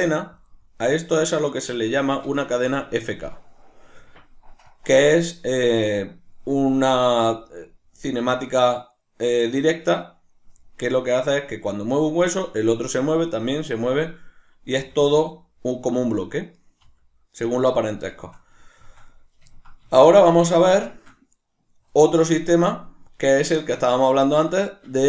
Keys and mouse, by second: 2.0-16.2 shift+middle drag, 16.6 right click, 16.8 r, 17.5 right click, 18.1-25.0 shift+middle drag.